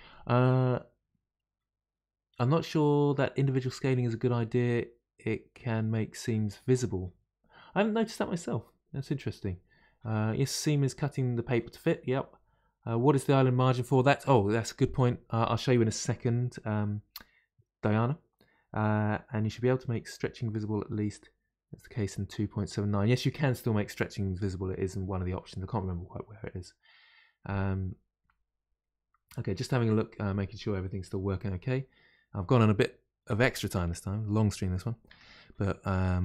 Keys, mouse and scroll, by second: 33.7-34.2 scroll down 1, 34.2-35.9 middle drag, 35.9-36.2 scroll up 1.